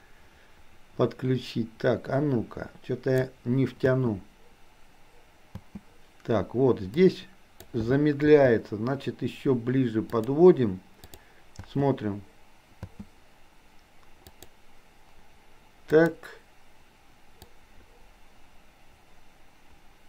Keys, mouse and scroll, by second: 3.9 space, 7.0 click, 8.3 g, 11.1 click, 11.6 space, 14.4 click, 16.0 click, 17.6-20.0 drag.